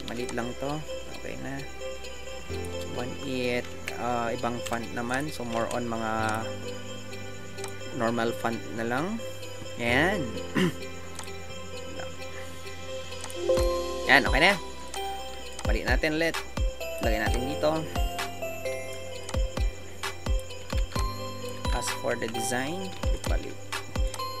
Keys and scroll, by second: 2.8 Return, 3.2 Return.